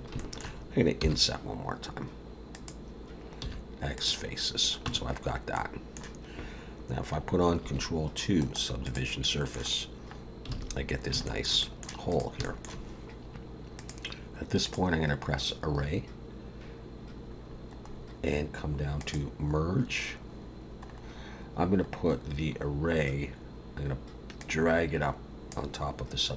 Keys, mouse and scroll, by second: 0.2 shift+middle click, 1.0 i, 3.4 x, 4.8 Tab, 5.5 middle click, 7.6 ctrl+2, 8.4 right click, 9.2 middle click, 10.2 scroll down 1, 10.5 alt+a, 11.2 shift+middle click, 11.6 middle click, 12.1 click, 12.4 shift+middle click, 13.7 click, 17.4-18.7 scroll down 7, 19.0 click, 20.9 scroll up 3, 21.8 scroll up 3, 24.4 click.